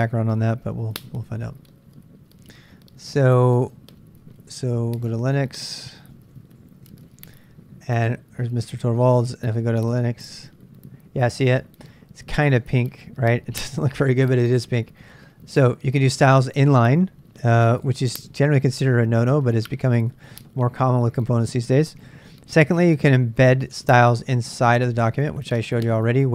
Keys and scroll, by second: 0.0 super+Tab, 0.2 super+Tab, 5.9-7.3 typing, 23.7 super+Tab.